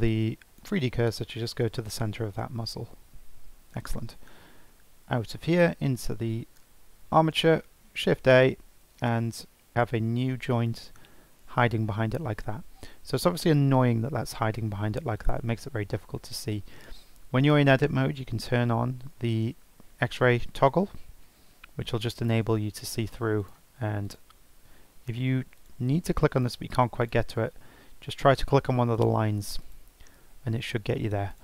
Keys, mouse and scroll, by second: 5.0 Tab, 5.5 click, 5.8 Tab, 7.9 shift+a, 9.7 g, 15.1 click, 19.8 Tab, 22.4 Tab, 23.4 click, 24.0 click, 25.6 click, 27.0 click, 28.9 click, 29.6 click, 31.3 click.